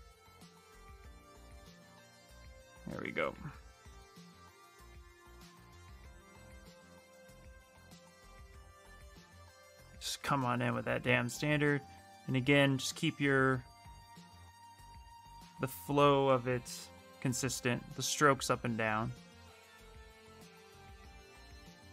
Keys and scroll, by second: 16.2-17.5 typing.